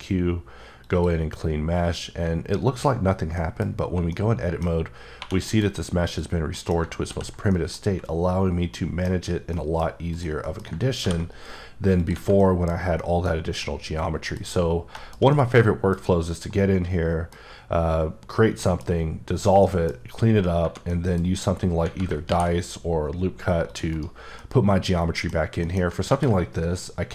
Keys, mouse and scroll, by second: 0.8 click, 2.7 scroll down 1, 3.3 middle click, 4.1 middle click, 4.7 scroll up 1, 5.2 typing, 5.4 middle click, 6.1 click, 6.5 middle click, 7.0 ctrl+x, 7.5 middle click, 10.1 click, 10.4 middle click, 11.0 ctrl+b, 12.0 click, 12.4 middle click, 12.7 scroll down 1, 12.9 middle click, 13.6-13.9 scroll down 1, 14.5-15.1 scroll up 2, 15.2 shift+scroll down 2, 15.3 middle click, 16.0 double middle click, 17.4 scroll down 1, 18.5 middle click, 20.9 middle click, 22.3 ctrl+r, 22.5-23.2 ctrl+scroll up 1, 23.6 click, 23.9 right click, 24.4 middle click, 26.0 r.